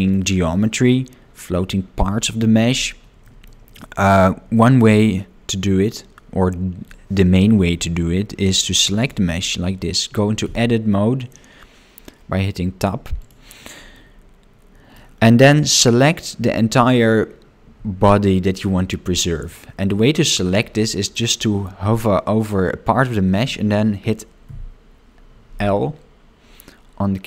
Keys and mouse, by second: 3.3 shift+middle click, 3.7 middle click, 4.6 shift+middle click, 5.1 middle click, 9.0 click, 14.0-15.0 middle drag, 25.8 l.